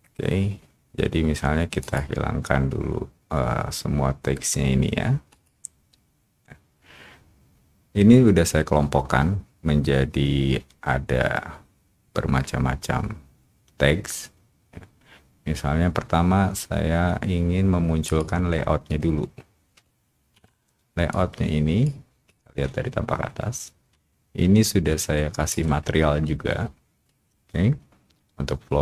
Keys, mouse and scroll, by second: 1.8 click, 5.3 click, 18.0 click, 21.1 click, 22.2-25.4 drag.